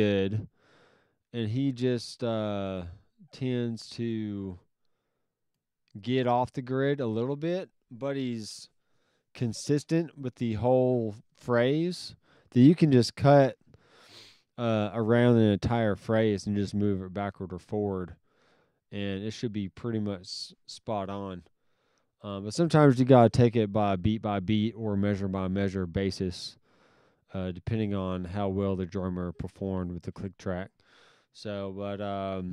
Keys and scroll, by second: 2.9 alt+s.